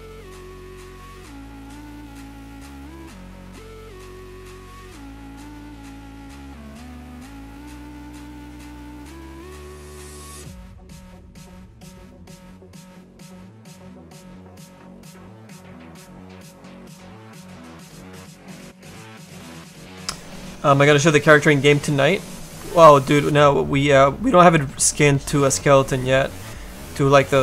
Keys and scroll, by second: 0.3 s, 2.1 s, 7.7 s, 27.2 s.